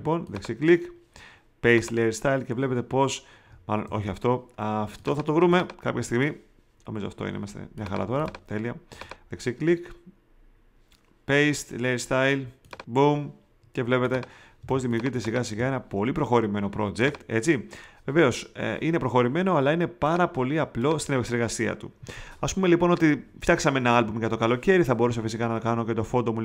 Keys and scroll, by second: 3.8 super+z, 14.6 space, 15.5 alt+super+space.